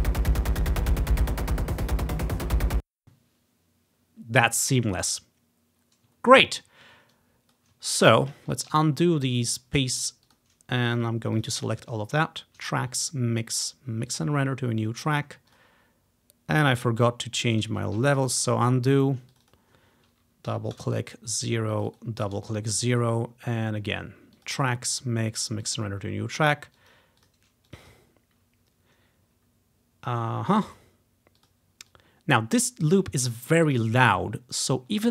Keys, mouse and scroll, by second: 1.7 ctrl+scroll down 2, 2.7 space, 6.5-6.9 ctrl+scroll up 1, 7.2 click, 8.5 ctrl+z, 8.8 ctrl+z, 9.6 click, 10.3 click, 10.9 click, 11.4 shift+click, 14.3 click, 14.9-15.3 scroll down 1, 15.6 click, 18.1 ctrl+z, 19.5 click, 20.6 0, 20.9 Return, 21.8 click, 22.3 0, 22.5 Return, 24.5 click, 25.8 click, 26.2 scroll down 1, 26.9 click, 27.3 click, 27.8 click, 27.9 click, 31.5 click, 32.0 click, 33.8 click, 34.1-35.1 ctrl+drag, 34.7-35.1 ctrl+scroll up 4.